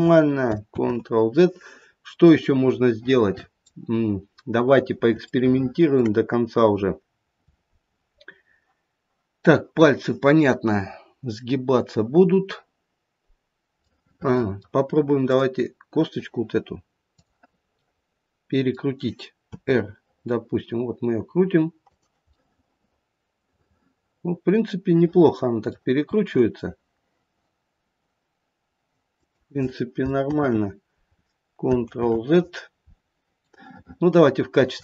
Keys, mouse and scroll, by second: 0.7 ctrl+z, 1.7-2.6 scroll down 2, 2.6 middle click, 2.8 middle click, 3.5 middle click, 3.9-4.9 scroll up 1, 4.9 scroll up 2, 5.3 shift+middle click, 5.9 shift+middle click, 6.6-7.0 scroll down 1, 7.0-8.0 scroll up 2, 13.9 middle click, 15.2 click, 17.7 click, 17.7 middle click, 17.9 middle click, 19.4 r, 22.3 middle click, 26.1 r, 30.3 ctrl+z, 31.9 ctrl+z, 33.4 middle click, 34.5 middle click.